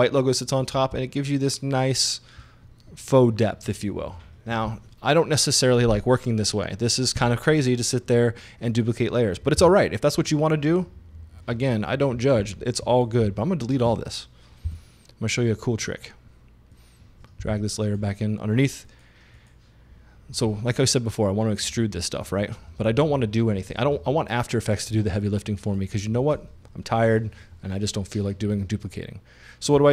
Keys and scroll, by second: 9.6 Delete, 14.7 shift+Delete.